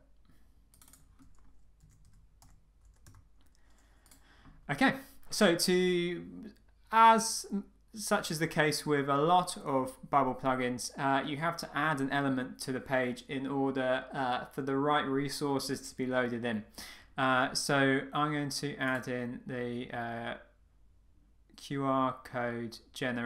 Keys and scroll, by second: 3.0 Return.